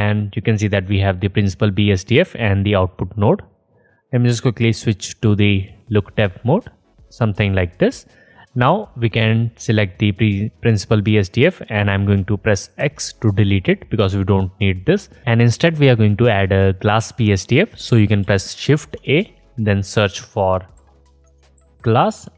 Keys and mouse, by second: 0.2-5.7 drag, 7.5 click, 8.9 click, 10.2 click, 10.9 click, 11.9-15.2 drag, 12.8 x, 18.6 shift+a, 21.8 s.